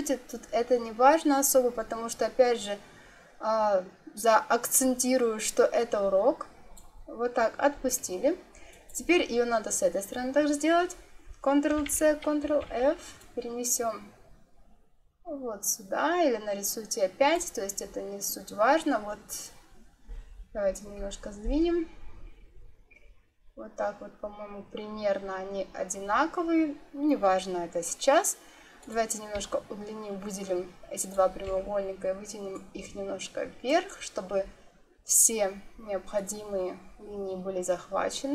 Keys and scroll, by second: 11.7 ctrl+c, 12.3 ctrl+f, 20.5 Right, 21.5 Right.